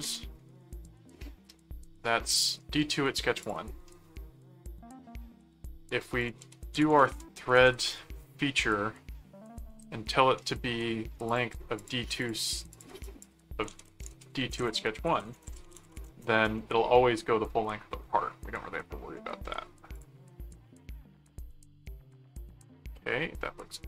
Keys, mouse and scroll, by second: 3.4 click, 6.1-7.6 typing, 6.2 click, 11.3-13.5 drag, 13.5-16.6 typing, 19.1 middle click, 19.9 click, 22.2 middle click.